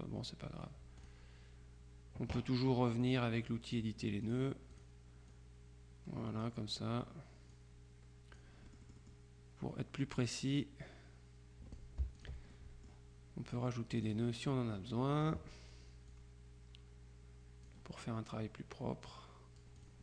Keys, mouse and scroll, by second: 1.1 click, 3.1-4.3 drag, 4.8-7.0 drag, 7.6-9.7 drag, 10.3-12.8 drag, 14.0 click, 16.2-18.2 drag, 19.1-20.0 drag.